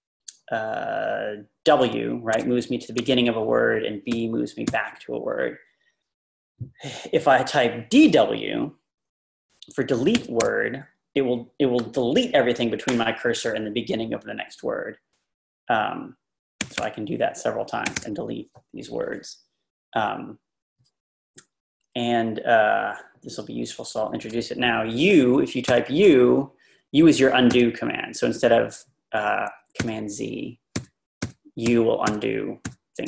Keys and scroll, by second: 2.4 w, 4.1 b, 10.0-10.9 typing, 16.4-17.9 typing, 25.7 u, 27.5 u, 29.8 typing, 31.2-33.0 typing.